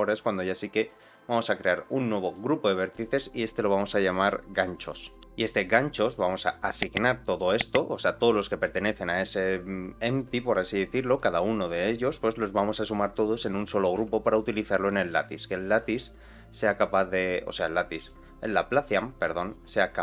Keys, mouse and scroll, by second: 0.8 click, 2.2 click, 2.9 click, 3.0-5.8 drag, 6.6 click, 6.9-7.3 scroll down 1, 7.3 middle click, 13.9 Tab, 14.5 middle click, 15.1-15.6 scroll up 1, 15.6 middle click, 16.5 click, 18.0-20.0 drag.